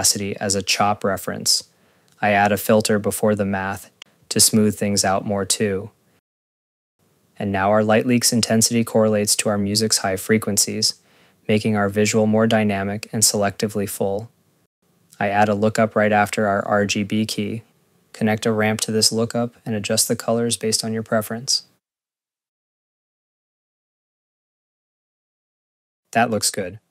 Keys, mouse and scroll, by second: 1.6 click, 2.4 right click, 3.1-4.3 typing, 5.7 click, 6.9 click, 7.5 click, 8.0 scroll, 9.4 scroll, 10.4 click, 12.6 click, 12.8 click, 13.7 Delete, 13.9 click, 13.9 click, 14.7 right click, 15.5-16.6 typing, 17.0 click, 18.3 Tab, 19.5 Return, 20.2 click, 20.2 click, 20.6 click, 21.2 click, 21.4 click, 22.0 click, 22.2 click, 22.5 click, 22.7 click, 23.1 click, 23.2 scroll, 23.3 click, 23.5 ctrl+s, 23.8 click, 24.3 click, 24.4 click, 24.5 click, 24.7 click, 24.8 click, 25.2 ctrl+s, 25.3 scroll, 25.6 click.